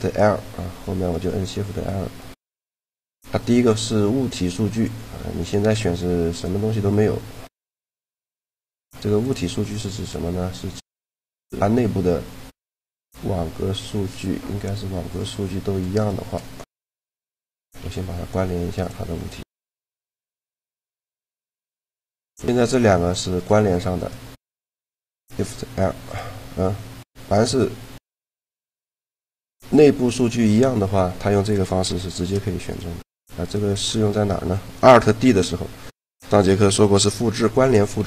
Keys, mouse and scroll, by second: 0.8-2.4 right drag, 6.8 click, 7.8 shift+l, 11.7 Tab, 12.5 Tab, 12.8-13.8 right drag, 13.1 Tab, 13.7 Tab, 14.0-15.6 drag, 15.6-17.4 right drag, 16.9 ctrl+l, 19.4 click, 21.3-22.5 middle drag, 22.9-25.0 right drag, 25.0 shift+l, 28.6-31.3 right drag, 31.7 shift+l, 33.2 right click, 33.6-35.1 drag, 37.8 alt+d.